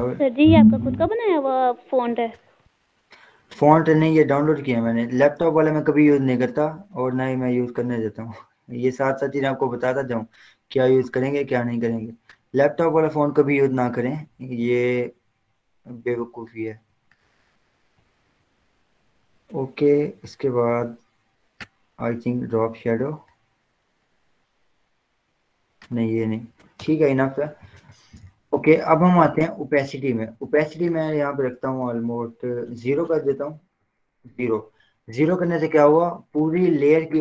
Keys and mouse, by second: 0.3-4.4 drag, 4.4-7.6 drag, 7.6 click, 9.9 click, 21.8 click, 23.3 click, 25.1 click, 26.9 Return, 27.8 ctrl+0, 30.8 click, 33.1 ctrl+a, 33.4 0, 34.4 Return.